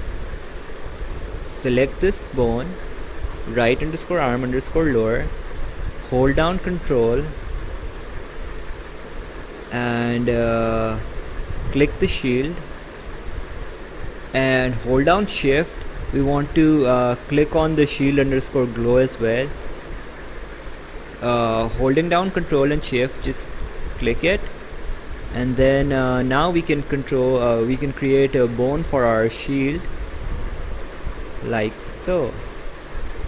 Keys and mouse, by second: 2.3 click, 12.8 ctrl+click, 23.8 ctrl+shift+click, 29.6 click.